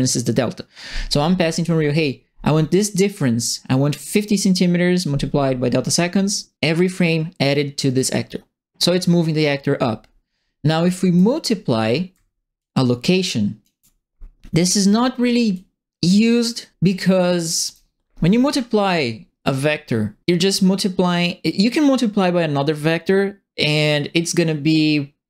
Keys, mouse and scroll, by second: 10.8 right click, 12.5-13.6 ctrl+drag, 14.6 click, 14.7 click, 15.5-16.7 drag, 16.9 right click.